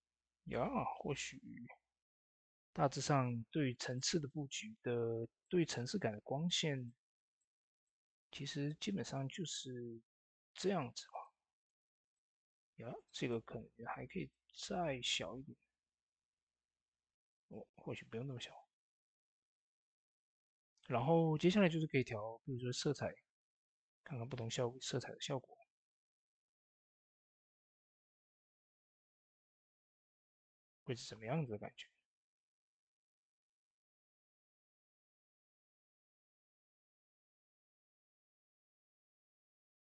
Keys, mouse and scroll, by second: 3.7 ctrl+s, 3.7 click, 7.9-8.5 scroll down 1, 8.5 click, 17.1 click, 17.2 ctrl+z, 22.6-33.4 drag, 27.3 typing.